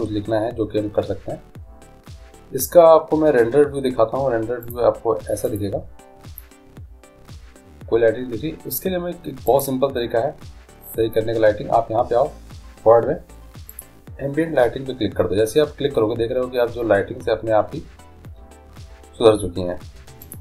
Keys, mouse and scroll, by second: 4.8-6.6 drag, 9.8-11.6 drag, 14.0-15.6 drag.